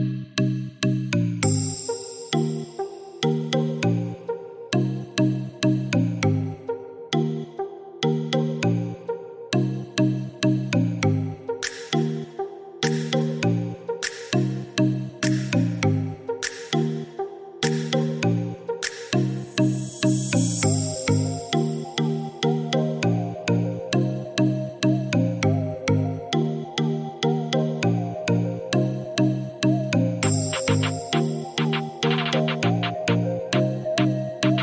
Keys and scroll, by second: 25.1 4, 25.3 Return, 31.4 9, 31.5 Return, 34.0 Escape.